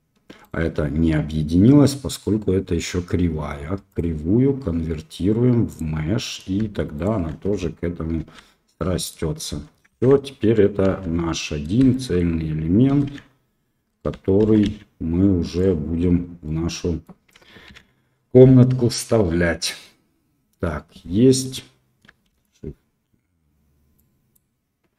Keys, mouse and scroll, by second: 0.4 click, 3.9-5.7 drag, 6.9 shift+click, 8.2 ctrl+j, 8.7 click, 9.8 shift+z, 10.8 KP_1, 11.9 shift+drag, 13.1 x, 14.4 shift+d, 16.4-17.0 drag, 17.6 ctrl+s, 19.2-21.4 middle drag, 22.2 shift+a, 23.9 click.